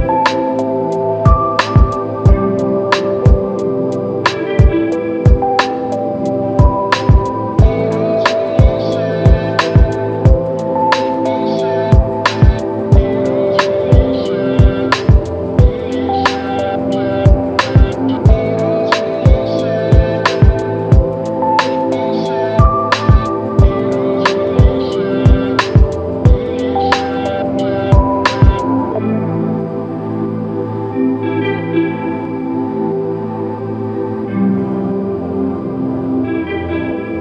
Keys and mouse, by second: 1.2 ctrl+i, 36.3 alt+shift+click, 37.1 ctrl+alt+click.